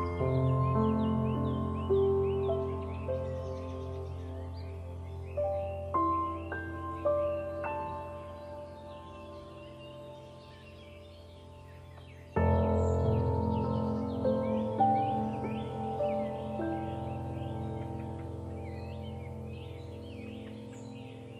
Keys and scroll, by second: 8.4 Return, 20.7 ctrl+0.